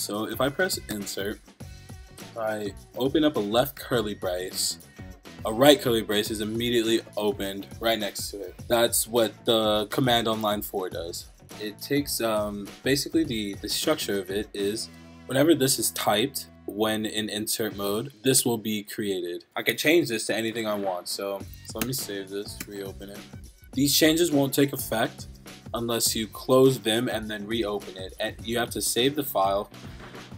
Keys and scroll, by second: 3.8 shift+[, 5.4 Right, 9.3 Up, 10.1 Right, 10.5 Right, 10.9 Right, 14.9 Right, 18.1 Right, 18.4 Right, 20.3 Left, 21.1 Up, 21.2-22.1 typing, 22.4 Up, 22.6 Return.